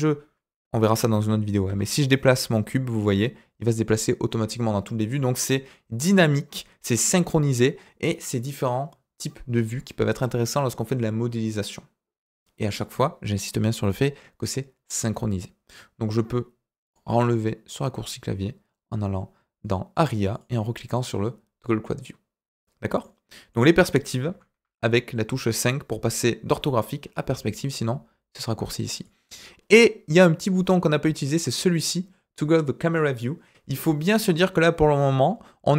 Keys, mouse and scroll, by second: 1.6 g, 16.8-20.4 drag, 23.0-23.5 middle drag, 24.6 KP_5, 25.4 KP_5, 26.0 KP_5, 26.7 KP_5, 28.3 click, 28.9 click, 29.7 scroll down 2, 35.2-35.7 middle drag.